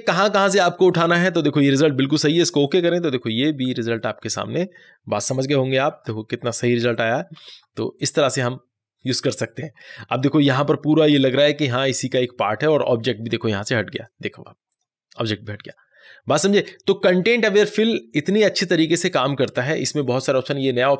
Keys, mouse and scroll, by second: 5.5 click, 5.9 ctrl+d, 7.3 ctrl+0, 13.8 ctrl+0, 13.9 click, 20.9 click.